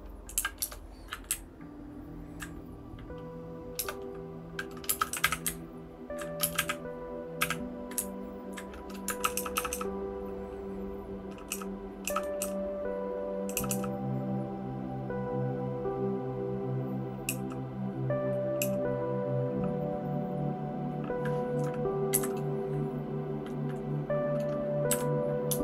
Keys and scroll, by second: 1.8-2.4 Down, 4.0 Return, 4.8-7.4 typing, 5.4 Down, 5.9 Down, 6.0 Down, 6.1 Down, 7.9 Down, 8.5 Down, 9.2 }, 9.3 }, 9.5 }, 9.7 }, 11.5 }, 12.4 ., 13.5 ., 13.7 ., 17.2 }, 18.6 }, 22.1 Up, 24.9 v.